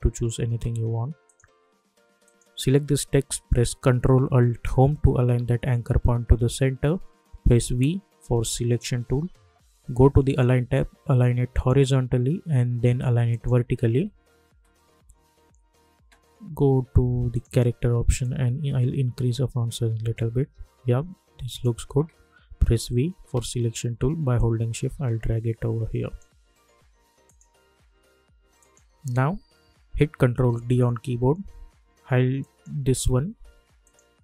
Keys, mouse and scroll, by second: 1.2 click, 4.6 ctrl+alt+Home, 7.6 v, 10.2 click, 17.3-21.5 drag, 22.7 v, 24.3-27.2 drag, 30.5 ctrl+d, 32.4 click.